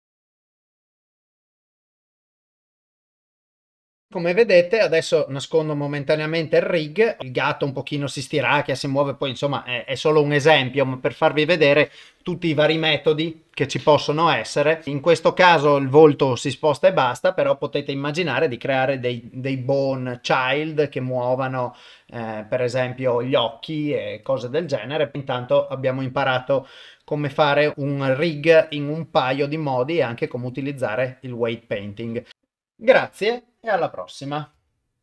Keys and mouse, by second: 0.0-3.8 typing, 0.1 ctrl+Tab, 0.1 click, 0.2 click, 0.4 click, 0.8 click, 2.0 shift+click, 2.2 click, 2.6 click, 3.0 click, 3.6 shift+Left, 3.6 ctrl+Tab, 3.7 ctrl+s, 3.7 ctrl+middle click, 5.8 click.